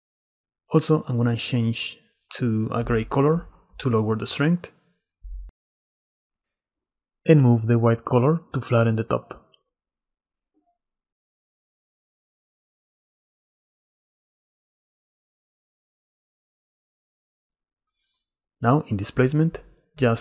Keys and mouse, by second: 0.6 click, 3.5-5.6 middle drag, 6.8 click, 7.1 middle click, 7.1-7.7 drag, 7.3 middle click, 7.5 middle click, 7.7 middle click, 8.3 click, 8.5 middle click, 8.7 click, 15.7 click, 19.2 middle click.